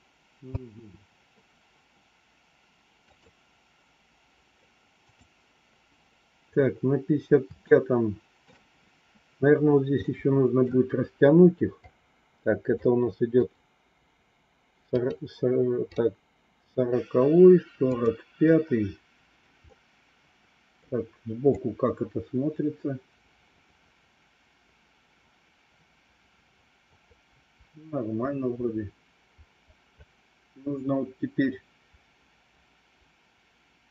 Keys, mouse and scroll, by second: 0.4 space, 2.9 click, 5.0 click, 7.6 shift+middle click, 10.1 middle click, 11.9 click, 13.3 click, 14.8 click, 15.8 click, 17.8 click, 19.6-20.7 middle drag, 21.5-33.9 drag.